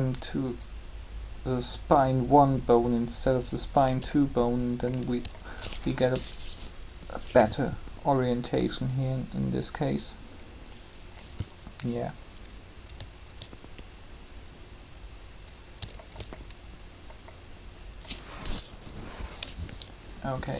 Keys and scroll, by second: 3.8 Tab, 6.3 3, 18.6 3.